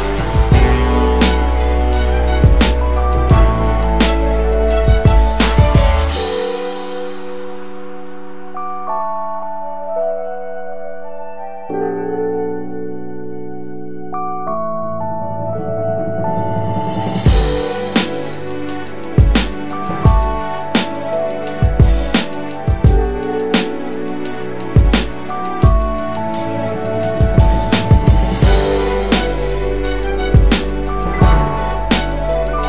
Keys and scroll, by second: 1.9 ctrl+alt+shift+-, 2.7-5.7 space.